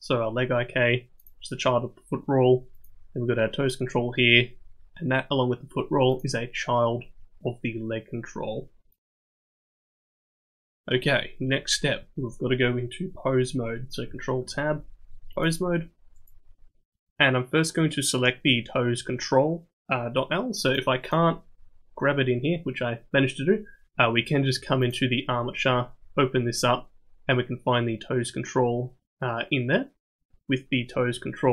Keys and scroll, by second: 14.4 ctrl+Tab.